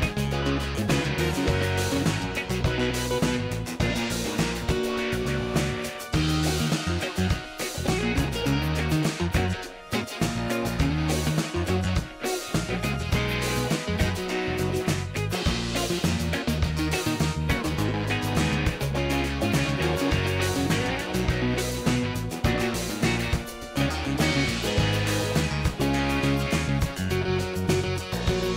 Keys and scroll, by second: 0.6 ctrl+alt+d, 2.3 ctrl+l, 5.3 ctrl+d, 5.6 ctrl+space, 5.9 ctrl+space, 8.1 space, 23.3 space.